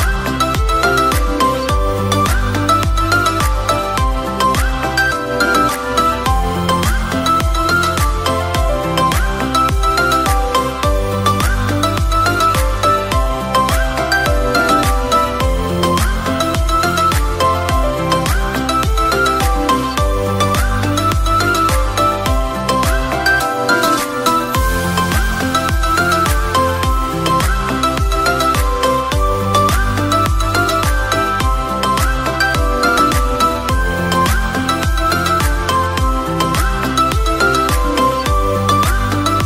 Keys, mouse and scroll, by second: 0.7 click, 4.7 click, 6.0 click, 7.4 click, 7.5 middle drag, 8.6 drag, 15.3-16.6 drag, 17.7-19.8 middle drag, 20.7 KP_3, 22.0 r, 22.3 x, 23.3 drag, 24.3 g, 24.7 z, 29.2 click, 29.9 scroll down 2, 30.4-31.3 middle drag, 31.6 click, 32.0-32.7 scroll down 2, 33.1 click, 33.7-34.3 scroll down 1, 34.3-35.4 drag, 38.2-38.9 drag, 39.0-39.4 middle drag.